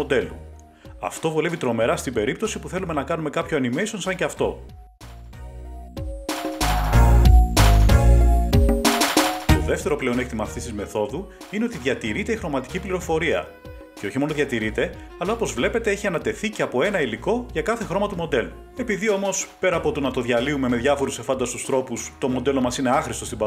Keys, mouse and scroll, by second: 10.4 click, 12.4 click, 14.5 click, 16.3 click, 18.1 click, 20.3 click, 21.9 click.